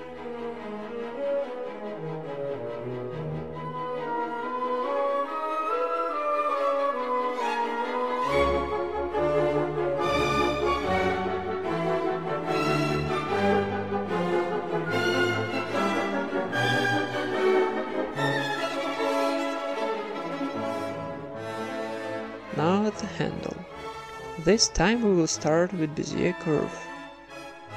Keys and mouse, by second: 0.5 s, 1.4 Tab, 2.0 Tab, 2.6 click, 2.8 a, 3.1 right click, 3.3 s, 4.2 Tab, 4.8 Tab, 5.3 click, 5.6 ctrl+KP_Add, 5.7 ctrl+KP_Add, 5.9 ctrl+KP_Add, 6.1 ctrl+KP_Add, 6.5 s, 7.9 KP_1, 8.3 z, 9.0 middle click, 9.7 s, 10.4 Tab, 10.6 z, 10.7 middle click, 11.6 Tab, 12.2 ctrl+r, 12.9 Tab, 13.4 Tab, 13.5 middle click, 13.9 ctrl+r, 14.8 ctrl+r, 15.2 alt+s, 15.8 Tab, 15.9 middle click, 17.5 Tab, 17.5 middle click, 17.8 a, 18.0-19.0 right drag, 18.4 g, 19.3 Tab, 19.4-21.4 middle drag, 19.9 KP_1, 20.7 ctrl+s, 21.1 a, 21.4 ctrl+s, 21.5 z, 22.2-23.3 drag, 22.8 shift+a, 24.5 Tab, 24.7 r, 25.7 r, 26.3 middle click, 27.0-27.7 right drag, 27.1 r, 27.6 g.